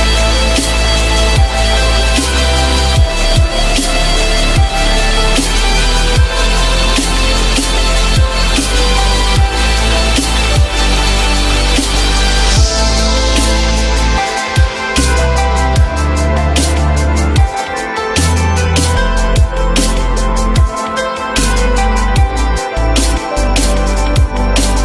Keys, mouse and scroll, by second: 0.4 F3, 5.2 alt+middle click, 11.5 alt+middle click, 13.1 alt+middle click.